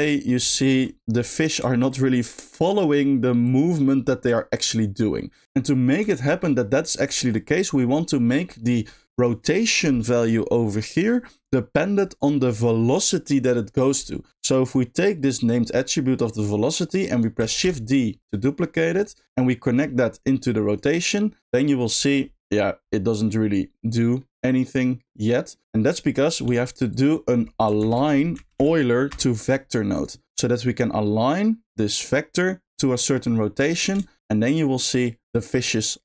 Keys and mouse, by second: 0.0-0.3 middle drag, 1.3 middle drag, 1.9-2.7 middle drag, 3.4 drag, 4.3 click, 5.4 space, 6.2 middle click, 6.4 middle click, 11.8 middle click, 14.4 click, 17.6 shift+d, 18.7 click, 19.2 middle click, 20.1 click, 21.9 click, 22.9 middle click, 23.2 middle drag, 24.2-24.6 middle drag, 25.0 middle click, 25.8 click, 27.6 shift+click, 27.8 shift+a, 30.8 click, 31.0-32.1 drag, 33.7 middle click, 34.2 middle click.